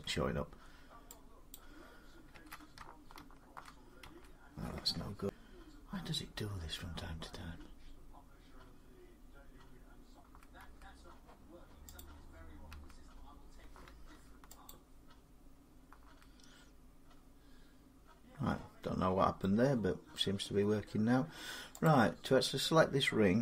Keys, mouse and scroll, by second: 1.4 click, 10.0 click, 11.8 click, 14.5 alt+click, 20.0 middle click, 20.8 scroll, 21.7 click.